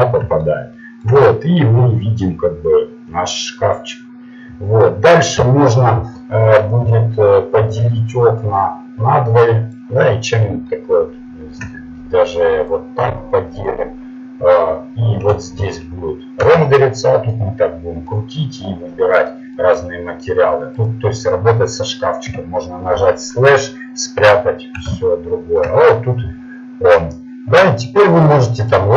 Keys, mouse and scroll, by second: 0.8 middle click, 1.2 middle click, 6.2 t, 6.8 n, 7.6 n, 8.5 click, 9.3 click, 9.6 click, 10.4 middle click, 15.6 shift+z, 16.5 shift+z, 20.9-22.3 right drag, 22.3 KP_Divide, 22.7 KP_Divide, 23.4-25.9 middle drag, 28.6-28.9 right drag.